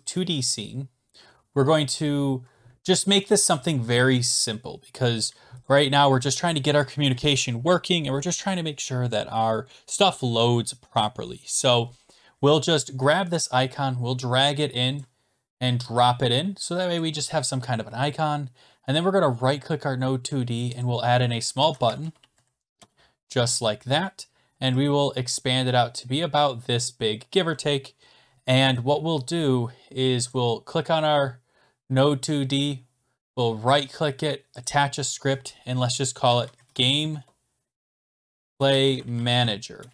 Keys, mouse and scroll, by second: 15.0 click, 17.0 click, 19.0-19.9 scroll down 1, 19.9 right click, 20.8 click, 21.3-22.8 typing, 24.0 middle click, 25.4 click, 27.4 click, 27.9-28.3 scroll down 13, 29.1 scroll down 1, 30.3 click, 33.4 right click, 33.4 scroll, 34.6 click, 36.0-39.8 typing, 39.3 click.